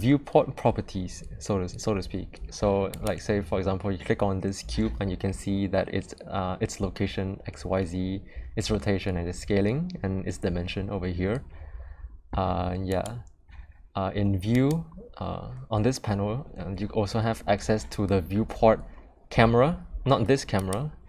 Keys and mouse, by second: 12.8 click, 14.5 click.